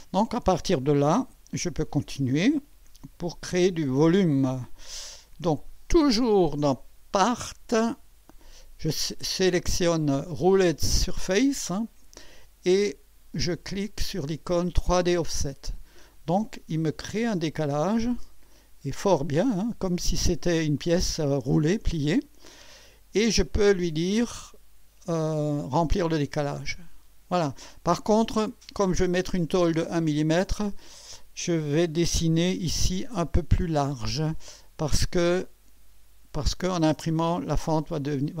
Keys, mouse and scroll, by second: 3.7 KP_1, 4.6 scroll up 1, 5.1-5.9 right drag, 9.5 click, 13.9 click, 15.1 click, 16.9 scroll up 2, 17.5-18.6 right drag, 18.8 scroll up 2, 26.6 click, 29.8 click, 34.7-35.4 scroll up 2, 35.9 scroll up 1.